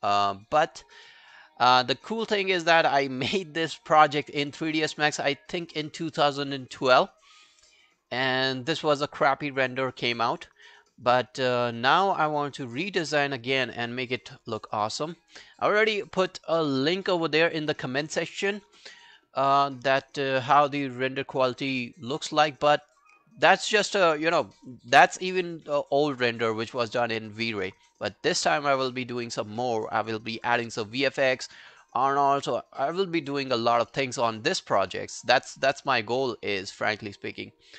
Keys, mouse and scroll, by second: 7.5 scroll down 1, 8.1 scroll down 1, 8.2 scroll up 2, 10.4 scroll down 2, 12.7-13.5 scroll up 1, 17.9 right click, 20.2 scroll down 2, 21.1-21.4 scroll down 1, 21.4 alt+right click, 21.6 alt+click, 22.2 alt+middle click, 22.5 alt+right click, 22.8 alt+click, 33.9 alt+middle click, 34.4 alt+scroll down 2, 34.6 alt+click, 34.9 alt+middle click, 35.3 alt+scroll down 4, 35.6 alt+middle click, 35.9 alt+scroll up 1, 36.2 alt+middle click, 36.6 alt+scroll down 2, 36.8 alt+click, 37.1 alt+scroll up 3, 37.4 alt+middle click, 37.7 alt+scroll up 1.